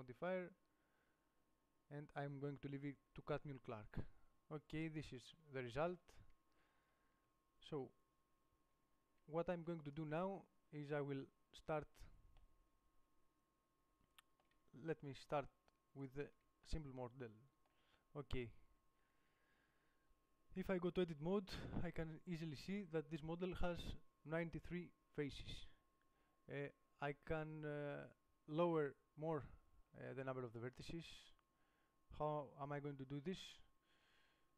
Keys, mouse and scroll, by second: 4.1 Tab, 7.5 KP_7, 9.0-10.1 middle drag, 12.5-13.9 middle drag, 15.1-16.4 middle drag, 18.8 middle click, 19.2 Tab, 29.1-32.4 middle drag, 33.6 middle click.